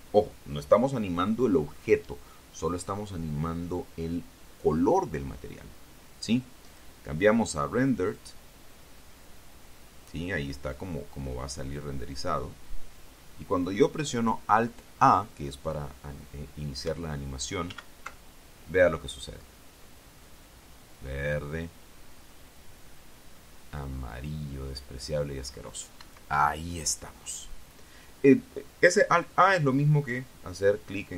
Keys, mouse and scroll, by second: 7.5 click, 8.9 click, 11.6-12.4 scroll up 2, 18.5 alt+a, 26.8 Escape.